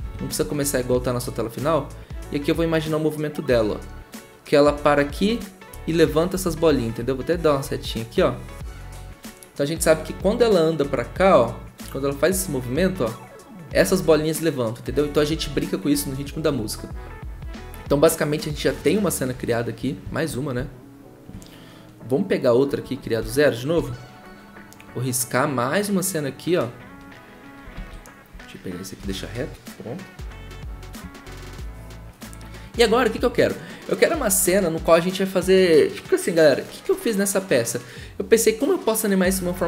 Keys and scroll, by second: 0.0 b, 6.4 ctrl+z, 15.4 ctrl+z, 23.2 ctrl+z, 23.7 b, 27.7 ctrl+z.